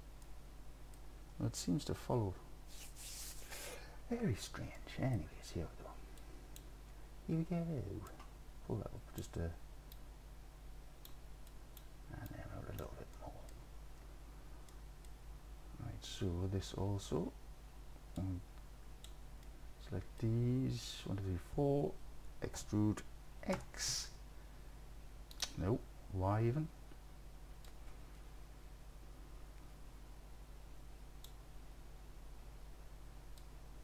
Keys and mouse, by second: 0.3 middle click, 4.8 middle click, 6.3 click, 8.2 click, 10.1 click, 11.6 click, 12.3 click, 13.2 middle click, 14.7 middle click, 18.2 click, 19.5 middle click, 19.8 click, 20.1 middle click, 22.6 e, 23.6 x, 25.4 click, 27.7-31.3 drag, 33.4-33.8 drag.